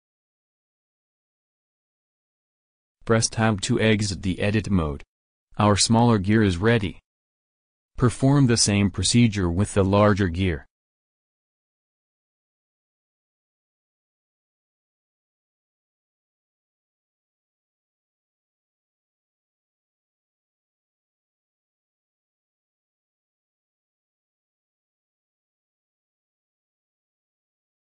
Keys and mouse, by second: 1.0 ctrl+z, 1.0 w, 2.3 middle click, 4.5 Tab, 9.8 Tab, 10.5 e, 12.1 a, 13.2 ctrl+r, 16.3 a, 17.7 shift+s, 20.1 shift+a, 25.9 s.